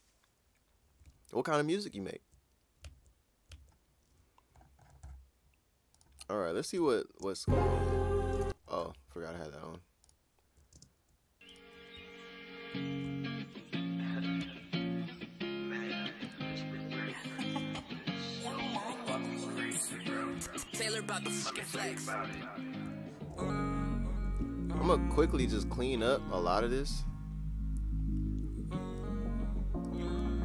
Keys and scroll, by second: 1.0 super+Tab, 2.8 super+Tab, 3.5 super+Tab, 6.8 Return, 7.2 space, 8.3 typing, 14.4 super+s, 20.5 super+s, 22.3 e.